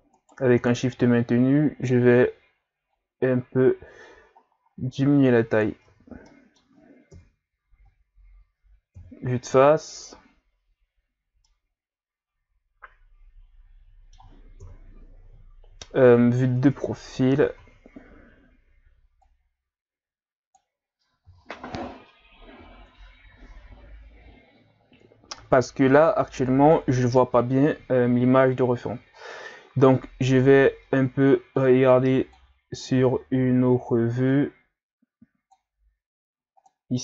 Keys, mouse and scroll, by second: 0.2 shift+right click, 0.9 s, 5.8 Tab, 6.2-7.2 middle drag, 7.2 KP_Divide, 8.9 KP_1, 9.5 a, 11.4-14.5 middle drag, 14.6 KP_3, 15.5-16.6 scroll up 5, 16.6 Tab, 17.3 a, 17.6 a, 19.2-21.3 drag, 21.3 o, 22.8 Tab, 23.3 a, 23.6 a, 25.4-28.6 middle drag, 28.6-29.5 scroll down 1, 29.5-31.3 scroll down 1, 31.3 scroll down 1, 31.6-32.6 drag, 34.8-37.0 drag.